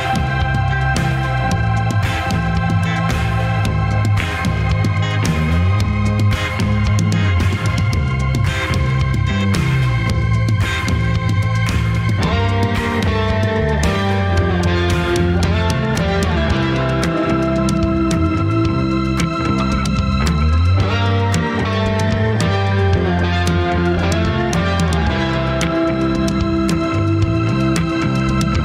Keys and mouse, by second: 1.3 click, 1.9 click, 2.4 click, 3.9-5.3 middle drag, 5.6 ctrl+s, 6.2-7.2 middle drag, 7.3 Tab, 12.5 click, 12.9 Tab, 13.7-15.1 middle drag, 17.8 ctrl+s, 18.5-23.1 middle drag, 23.9 Tab, 24.4 Tab, 27.4 click, 27.8 click.